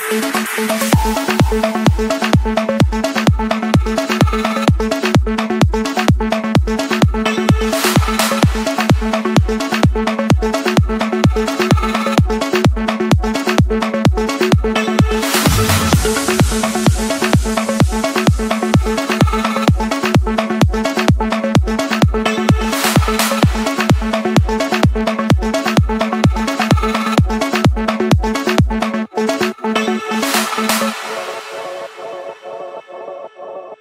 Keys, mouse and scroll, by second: 3.9 click, 5.3-6.4 middle drag, 5.3-6.4 scroll up 1, 7.4 click, 11.0 Delete, 12.5 l, 13.2 Return, 15.0 click, 23.7 click, 25.5 click, 25.8 Escape, 26.9 click, 28.8 click, 29.1 j, 30.8 Return, 31.3-32.3 scroll.